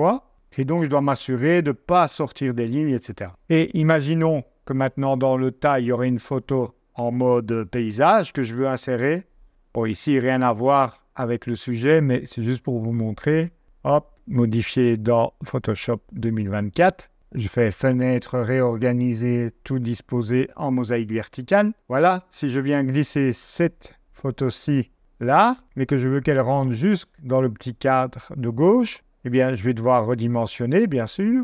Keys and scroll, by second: 5.0 BackSpace, 6.4 super+Tab, 28.9 super+t.